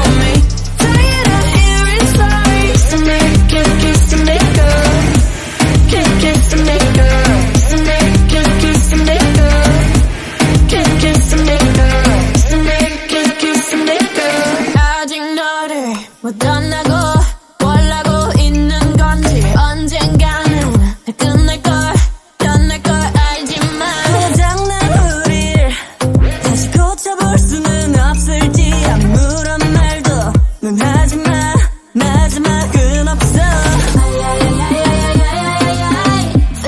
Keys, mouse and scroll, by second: 1.3 shift+d, 1.9-2.5 drag, 2.5-3.0 middle drag, 4.9-5.4 scroll down 3, 5.4-6.2 drag, 6.7-8.8 middle drag, 9.0 click, 12.6 click, 13.0 scroll down 1, 13.2-14.0 middle drag, 14.0 click, 14.9 click, 15.2-16.1 middle drag, 16.1 click, 16.6-20.1 middle drag, 20.1 click, 21.4 click, 22.4 click, 22.6-23.4 middle drag, 23.4 click, 23.6 middle click, 24.4 click, 24.7-25.1 middle drag, 25.1 KP_1, 25.8 shift+a, 26.0 KP_0, 27.7-31.0 drag, 31.7 click, 32.7-34.4 drag, 35.2-36.6 drag.